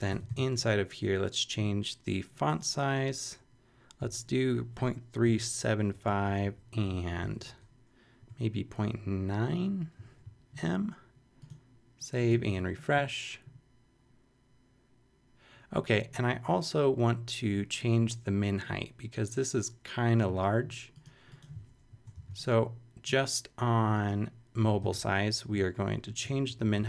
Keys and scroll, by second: 0.1 Return, 0.3 super+v, 4.0 3, 5.2 7, 5.8 7, 5.9 Down, 6.8 Left, 8.2 ., 8.5 9, 21.9 shift+super+Left, 22.1 shift+super+c, 23.0 super+c, 24.6 Return, 24.8 super+v, 26.0 super+[, 26.5 super+Left.